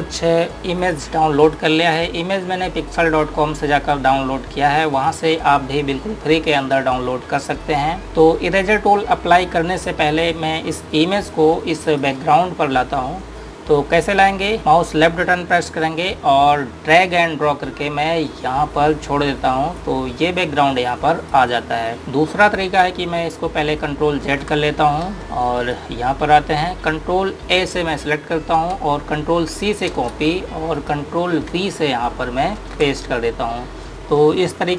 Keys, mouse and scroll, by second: 12.6 click, 17.6 click, 24.7 z, 25.3 z, 26.2 click, 29.2 ctrl+a, 30.5 ctrl+c, 31.5 click, 33.2 ctrl+v.